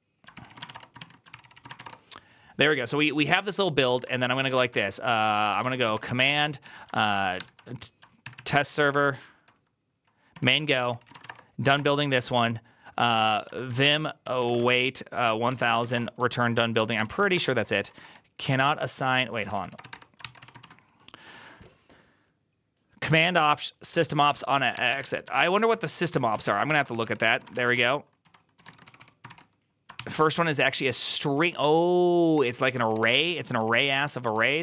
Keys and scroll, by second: 0.2 ctrl+c, 0.5-1.6 typing, 0.9 Return, 1.2 ctrl+c, 1.6 ctrl+c, 1.7 Return, 3.9-8.6 typing, 10.2 Tab, 10.5 ctrl+c, 10.6 ctrl+c, 10.8-21.0 typing, 15.1 Tab, 24.5-29.7 typing, 29.8 ctrl+c, 31.0-34.6 typing.